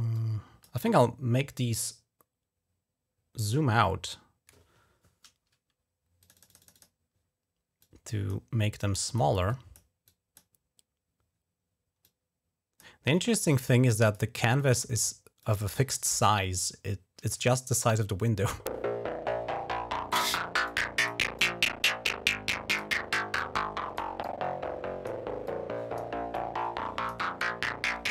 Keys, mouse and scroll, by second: 0.0 click, 6.0 click, 6.1 right click, 6.1 click, 6.2 right click, 6.3 click, 6.5 right click, 6.5 click, 7.6 click, 8.1 right click, 8.6 click, 9.3 click, 9.9 click, 11.8 click, 12.6 middle click, 12.9 click, 13.3 middle click, 13.8 click, 13.9 middle click, 14.0 right click, 14.4 click, 14.8 right click, 15.2 click, 15.7 right click, 15.8 click, 16.4-17.4 drag, 20.4 click, 21.1-22.6 drag, 23.1 click, 24.0 click, 25.3 click, 26.1 click, 27.2 click.